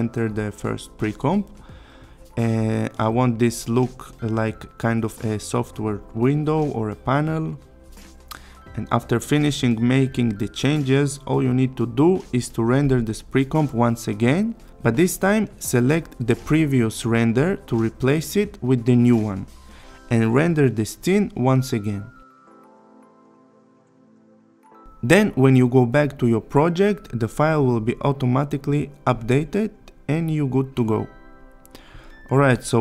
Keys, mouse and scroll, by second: 0.1 d, 0.5 v, 0.7-1.1 click, 1.3 ctrl+d, 1.4-1.9 click, 3.5 click, 5.1 click, 6.4 click, 9.0 click, 11.0 click, 12.7 click, 20.4 click, 27.2 click, 29.6-30.2 click, 30.7 space.